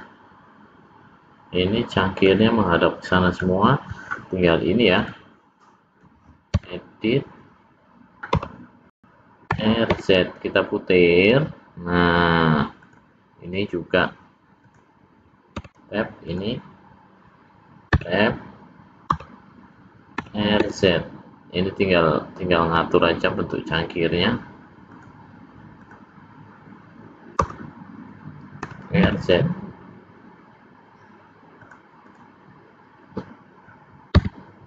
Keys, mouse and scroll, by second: 2.7 middle click, 4.9 click, 6.7 Tab, 8.4 l, 9.4 r, 14.5 click, 15.6 Tab, 16.1 click, 18.0 Tab, 19.1 l, 20.1 r, 25.7 click, 27.4 l, 28.5 r, 32.0 click, 34.2 Tab.